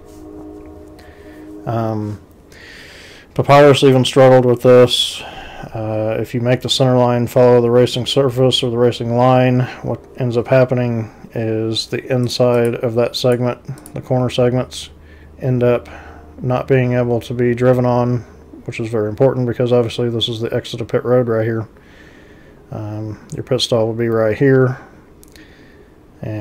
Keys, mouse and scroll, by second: 12.3 click, 12.6 click, 13.2 click, 13.8 click.